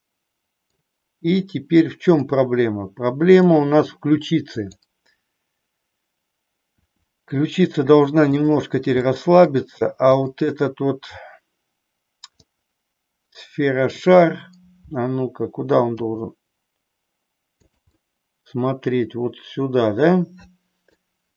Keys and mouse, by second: 3.5 middle click, 4.5 click, 6.9 r, 8.4 click, 9.1 middle click, 10.2-11.4 drag, 12.5-14.0 middle drag, 16.0 g, 17.8 click, 18.0-21.0 middle drag.